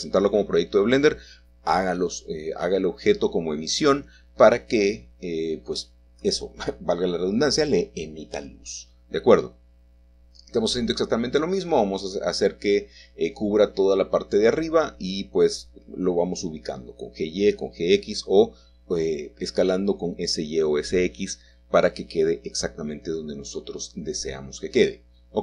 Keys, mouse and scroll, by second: 0.3 KP_7, 1.6-2.4 scroll down 1, 3.0 shift+middle click, 5.5 middle click, 8.7 click, 11.7-12.9 drag, 13.1 middle click, 13.8 typing, 16.7 click, 19.4 middle click, 20.1 scroll up 1, 20.5 g, 22.7-25.4 shift+middle drag, 22.9 shift+click.